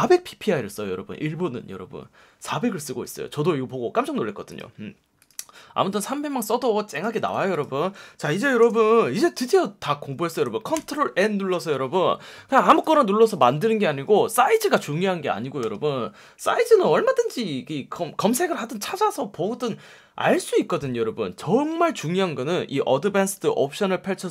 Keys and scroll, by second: 7.2 ㅍ, 8.6 super+space, 10.7 super+n, 14.7 F1, 15.5 F1, 23.3 F1.